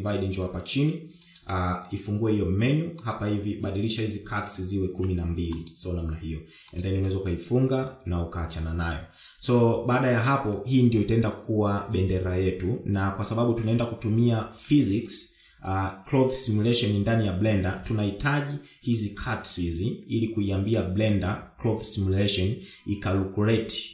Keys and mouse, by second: 1.5 click, 3.2-5.9 drag, 6.9 click.